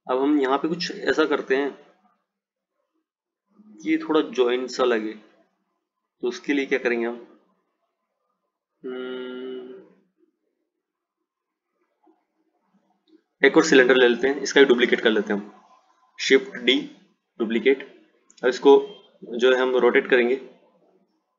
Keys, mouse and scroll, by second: 15.4 click, 16.8 shift+d.